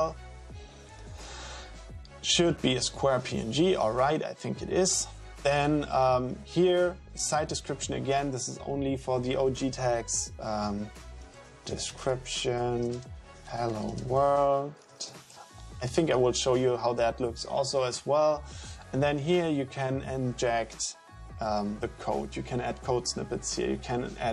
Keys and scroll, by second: 11.0-15.2 typing.